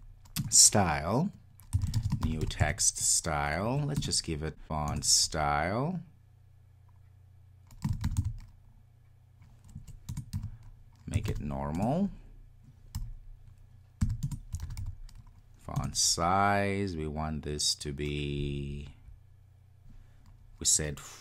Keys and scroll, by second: 0.5 Return, 4.9 Return, 10.1 Return.